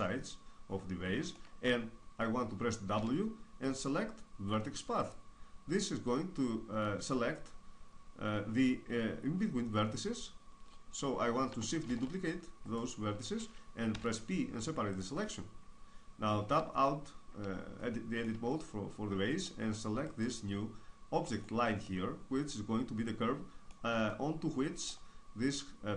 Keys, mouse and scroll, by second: 0.3-2.0 middle drag, 2.7 w, 11.6 shift+d, 12.5-14.7 right drag, 13.7 p, 16.3 Tab, 17.7 middle click, 20.0-22.5 right drag, 21.6 middle click, 21.9 middle click, 22.1 middle click, 22.5 middle click, 23.8-25.6 middle drag.